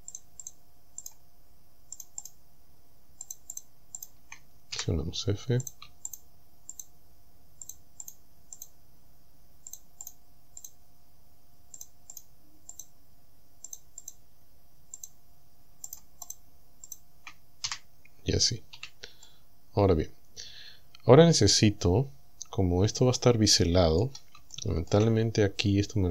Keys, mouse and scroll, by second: 0.2 shift+right click, 0.5 shift+right click, 1.1 shift+right click, 2.0 shift+right click, 3.3 shift+right click, 3.7 shift+right click, 4.0 shift+right click, 4.8 f, 5.7 right click, 6.1 shift+right click, 6.8 shift+right click, 7.7 shift+right click, 8.1 shift+right click, 8.6 shift+right click, 9.8 shift+right click, 10.1 shift+right click, 10.6 shift+right click, 11.8 shift+right click, 12.2 shift+right click, 12.8 shift+right click, 13.7 shift+right click, 14.1 shift+right click, 15.0 shift+right click, 15.9 shift+right click, 16.3 shift+right click, 16.9 shift+right click, 17.7 f, 18.4-18.8 scroll down 1, 18.8 a, 19.3-24.2 middle drag, 24.5 shift+middle click, 25.0-25.7 shift+scroll up 2.